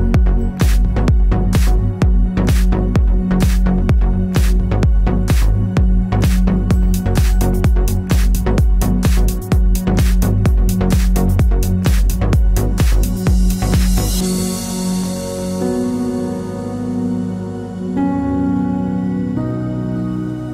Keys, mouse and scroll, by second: 0.1 click, 0.6 KP_2, 0.7 Return, 2.2 v, 2.9 alt+shift+click, 8.0 shift+click, 8.8 ctrl+g, 9.2 click, 9.6-12.7 typing, 16.4 ctrl+Num_Lock, 16.6 =, 17.5 ctrl+=, 18.2 scroll up 1, 18.4 scroll down 1, 18.6 scroll up 1, 19.2 scroll down 1.